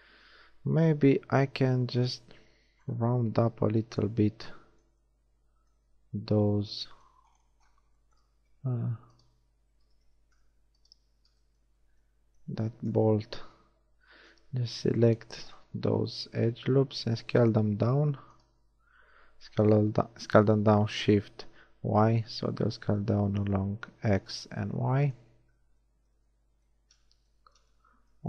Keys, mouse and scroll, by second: 2.0 right click, 9.0-11.4 alt+shift+drag, 10.2 ctrl+alt+shift+z, 12.8 KP_1, 17.4 shift+s, 19.4 s, 25.4 z, 26.1 z.